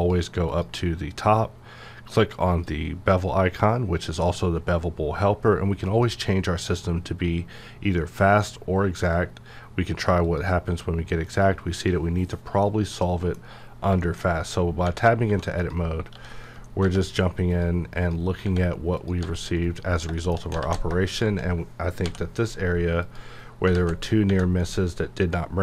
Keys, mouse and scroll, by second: 5.8 click, 5.9 click, 9.0 click, 12.6-14.0 middle drag, 14.2-14.6 scroll up 1, 15.3 1, 15.6 click, 16.1 g, 16.4 right click, 17.5 click, 19.0 click, 19.2 g, 19.6 right click, 19.9-20.4 scroll up 2, 20.2 shift+middle click, 20.6 alt+z, 21.1 shift+click, 22.0 m, 23.0 click, 23.5 scroll down 1, 24.0 scroll down 1, 24.3 Tab, 24.6-25.6 middle drag.